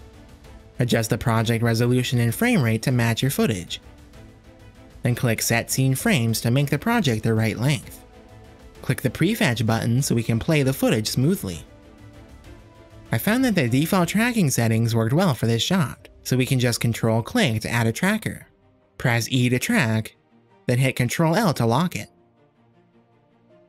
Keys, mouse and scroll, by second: 1.6-3.0 drag, 3.2-4.3 drag, 4.6-5.2 drag, 6.6 click, 8.3 Home, 9.9 click, 11.6 click, 13.5 click, 16.9 ctrl+click, 19.0 e, 21.4 click, 23.0 ctrl+l.